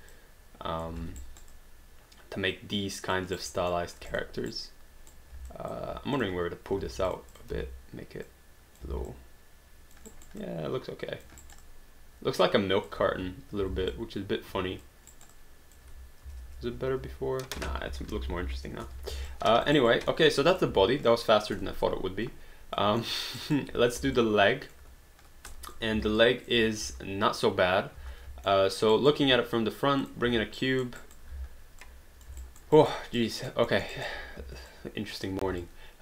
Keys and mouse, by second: 1.0 alt+d, 1.3 alt+right click, 1.5 alt+click, 3.4 alt+right click, 3.8 alt+middle click, 4.1 click, 4.5 right click, 5.5 alt+click, 6.2 click, 6.8 q, 7.1 shift+click, 7.5 w, 8.3 click, 9.1 alt+click, 10.2 alt+right click, 10.4 alt+click, 11.5 alt+right click, 11.7 alt+click, 13.2 ctrl+z, 13.7 alt+d, 13.9 alt+click, 15.1 alt+right click, 15.5 alt+click, 16.3 ctrl+z, 17.9 ctrl+y, 19.1 alt+d, 19.3 alt+click, 19.8 alt+right click, 20.1 alt+middle click, 20.5 click, 21.1 alt+click, 23.0 alt+middle click, 23.4 alt+right click, 24.2 alt+click, 25.5 alt+click, 25.9 alt+d, 26.2 alt+click, 26.8 space, 28.0 space, 28.5 alt+middle click, 28.9 alt+right click, 30.0 click, 30.8 alt+right click, 31.3 w, 31.8 click, 32.4 alt+right click, 33.7 alt+middle click, 33.9 alt+right click, 34.4 w, 34.7 click, 35.6 r, 35.6 click.